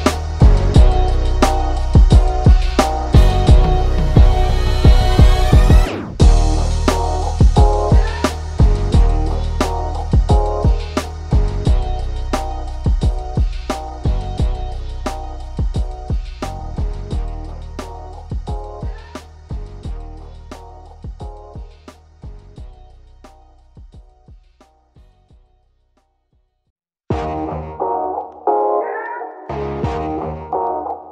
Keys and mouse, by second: 0.8 ctrl+=, 1.6-4.0 drag, 4.3-5.4 drag, 5.4 ctrl+0, 6.2 click, 7.8 ctrl+=, 8.6-10.1 drag, 10.7 click, 13.8-17.4 drag, 18.8 click, 20.1 click, 21.6 ctrl+z, 22.1-23.7 drag, 25.7-27.0 drag, 28.6 click, 30.4-31.1 drag.